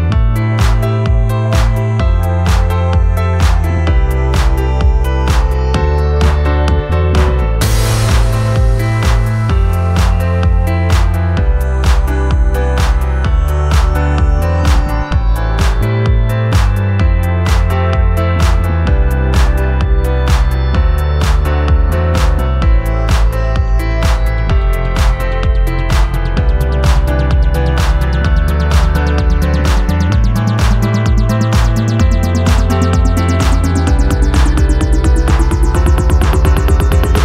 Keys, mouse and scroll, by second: 15.5 ctrl+t, 22.2 alt+Left, 22.3 alt+Left, 22.4 alt+Left, 22.4 alt+Left, 22.7 alt+Left, 22.8 alt+Left, 22.9 alt+Left, 23.8 alt+Right, 24.0 alt+Right, 31.8 ctrl+j.